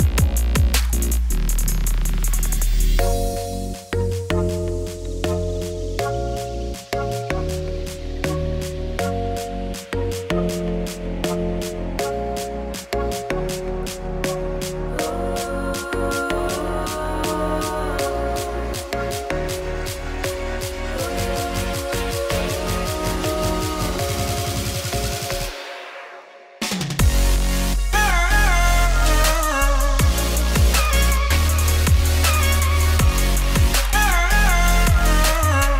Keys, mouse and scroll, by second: 3.7 Tab, 4.0 s, 4.8 Tab, 5.9 Tab, 6.0 r, 7.7 middle click, 8.0 s, 8.8 middle click, 9.2 ctrl+r, 10.5 ctrl+r, 12.7 2, 12.8 click, 14.4 middle click, 14.6 g, 15.5 middle click, 16.1 Tab, 17.3 r, 17.9 Tab, 19.4 g, 20.1 Tab, 21.2 Tab, 22.7 Tab, 23.3 shift+d, 24.3 Tab, 26.4 Tab, 27.3 Tab, 29.0 1, 29.1 click, 32.0 1, 32.1 click, 32.3 g, 33.8 click, 34.1 g, 34.6-35.7 drag.